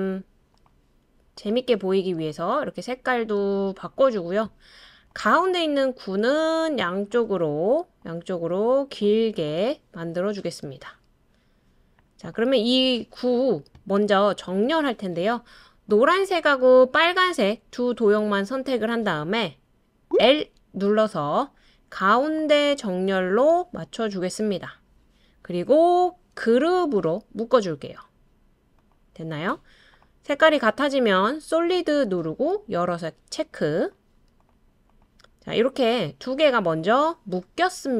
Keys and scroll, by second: 20.2 i.